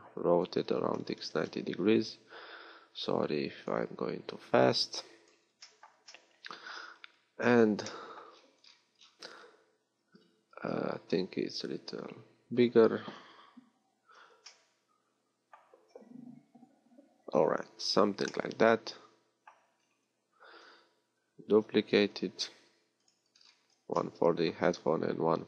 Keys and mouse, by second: 0.4-1.5 drag, 0.4 r, 3.8-5.8 drag, 11.6 s.